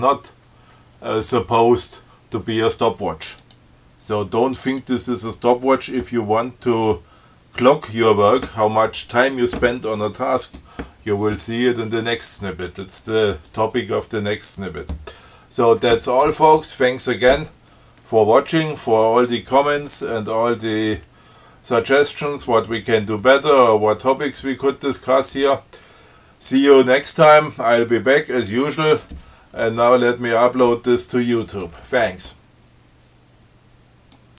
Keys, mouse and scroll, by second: 3.7 click, 5.0 click.